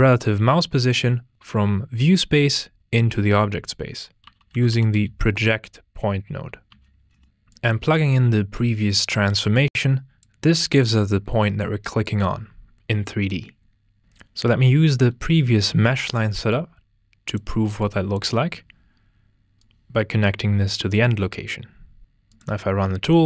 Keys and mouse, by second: 7.5 drag, 9.6 click, 16.5 drag, 19.5 drag, 22.0 ctrl+space, 22.4-23.2 drag.